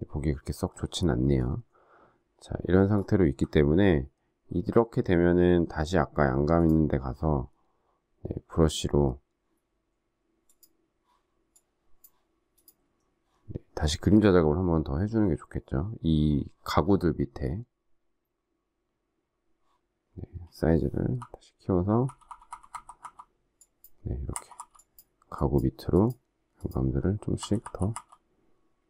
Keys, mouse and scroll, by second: 0.7 alt+scroll down 1, 1.3 alt+scroll up 1, 2.9 alt+scroll down 1, 21.1-24.7 typing, 27.3-27.9 typing.